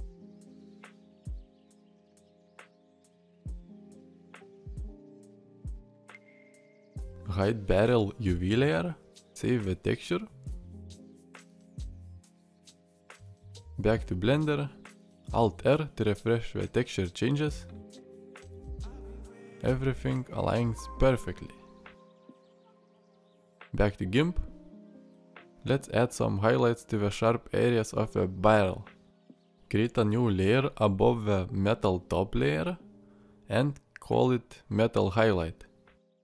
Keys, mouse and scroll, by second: 14.9 alt+r, 17.5 alt+r, 17.8 middle drag, 18.2 middle click, 18.7 shift+middle drag, 19.0-19.6 middle drag, 22.2 shift+middle click, 22.3 middle click, 22.7-23.3 ctrl+middle drag.